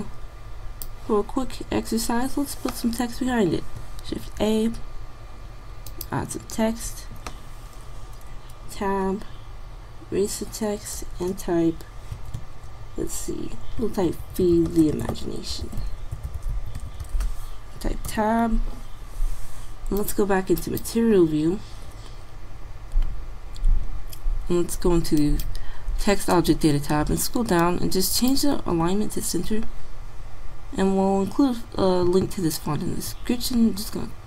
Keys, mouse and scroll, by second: 1.5-4.3 middle drag, 4.3 shift+a, 8.7 Tab, 9.6-10.4 BackSpace, 14.0-17.3 typing, 18.6 Tab, 20.1 click, 26.4 click, 28.3-29.7 drag.